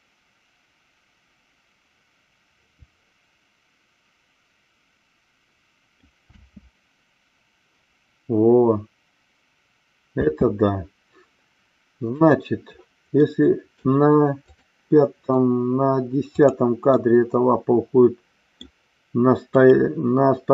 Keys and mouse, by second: 6.3 space, 10.2 space, 12.2 click, 13.2 middle click, 14.4 click, 16.3 click, 16.9-18.5 middle drag, 19.5 click.